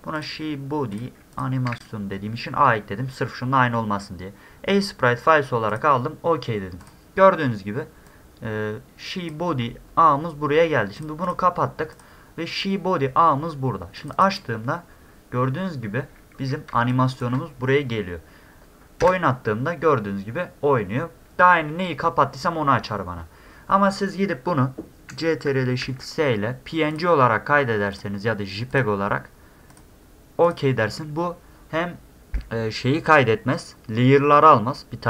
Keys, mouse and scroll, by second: 0.2 click, 0.9 click, 1.3 click, 1.7 a, 5.7 click, 6.8 click, 8.1-9.3 drag, 11.0 click, 11.2 click, 11.9 click, 14.0 click, 14.1 click, 15.6 middle click, 15.6 scroll up 2, 16.7 space, 16.9 click, 25.8 ctrl+shift+s, 26.9 click, 27.9 click, 28.7 click, 29.7 click, 30.4 click.